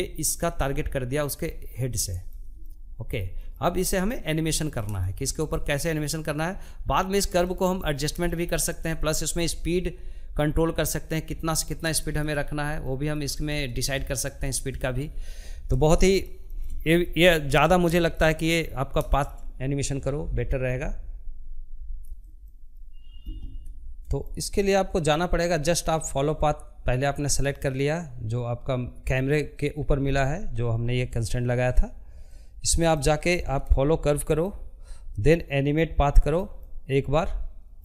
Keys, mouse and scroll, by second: 1.0 scroll down 1, 1.3-2.4 shift+middle drag, 2.4-3.1 scroll down 1, 3.1 scroll down 1, 3.2-27.0 middle drag, 32.6-37.8 drag.